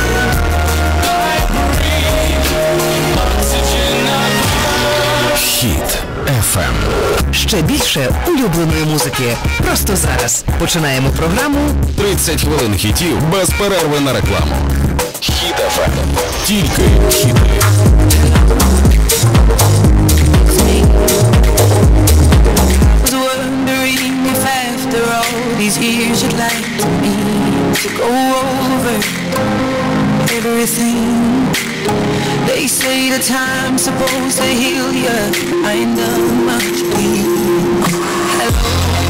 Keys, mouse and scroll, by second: 23.0 Page_Down.